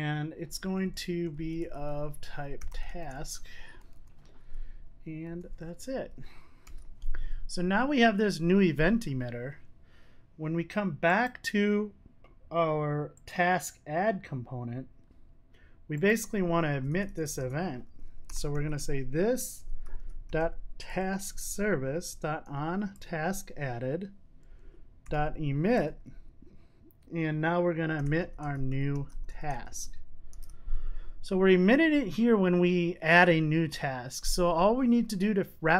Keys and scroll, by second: 2.8 Return, 6.7 super+s, 16.7 Tab, 19.4 Tab, 20.9 Return, 30.4 super+s.